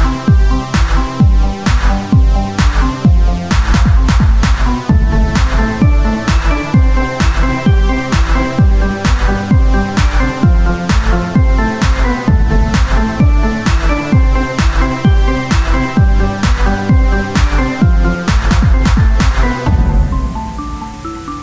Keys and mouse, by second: 0.6 KP_3, 1.0 Tab, 1.8 Tab, 1.8-3.7 drag, 1.9 Tab, 2.8 z, 2.8 c, 4.7-5.7 drag, 5.9 Tab, 6.1 z, 9.2 ctrl+z, 10.1 ctrl+z, 10.1 Tab, 11.8 Tab, 14.7 Tab.